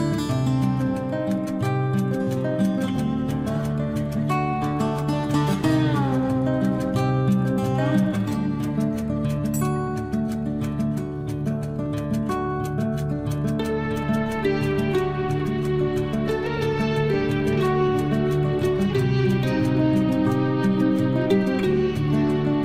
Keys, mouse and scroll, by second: 0.8 shift+1, 1.1 3, 1.7 shift+', 5.8-7.9 typing, 10.2 click, 11.4 9, 11.7 Return, 12.4 space, 17.5 l, 18.2 scroll up 1, 20.5 click, 21.6 click.